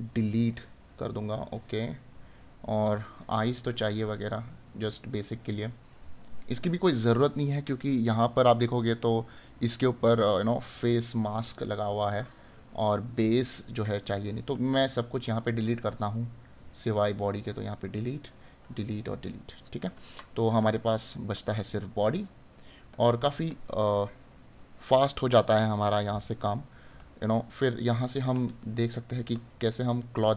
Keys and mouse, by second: 12.9 right click, 19.8 right click.